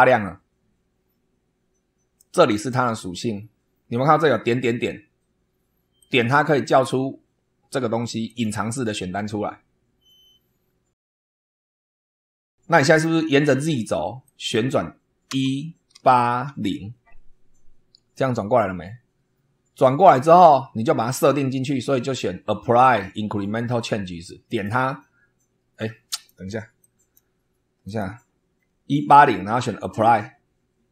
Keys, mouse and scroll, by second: 5.9 click, 8.2 click, 14.2 click, 15.2 1, 15.9 8, 16.4 0, 24.4 click, 26.1 click, 26.7 click, 27.8 click, 29.7 click.